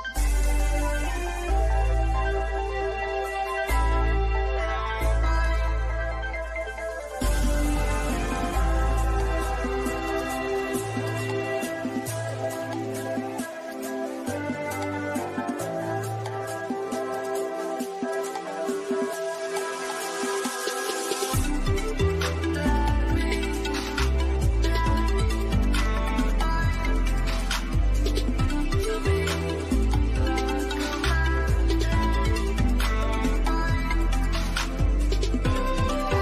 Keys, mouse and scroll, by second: 0.3-0.7 scroll down 1, 4.7 click, 5.6-6.3 scroll down 1, 7.6 click, 8.7 Left, 9.5-10.0 scroll up 1, 10.4 click, 10.9-12.7 middle drag, 12.7 scroll up 1, 13.3 middle click, 15.4 scroll down 1, 16.6 click, 16.9 Left, 17.5 click, 17.8-18.3 scroll down 1, 19.4 middle click, 19.6 middle click, 20.0 scroll down 1, 20.9 scroll up 1, 21.6 middle click, 22.8 click, 23.4 Right, 25.1 click, 25.4-26.1 scroll down 1, 26.1 middle click, 26.5 scroll down 1, 26.8 middle click, 29.1 click, 29.9-30.2 scroll down 1, 30.9-32.4 shift+middle drag, 32.4 click, 35.3 click.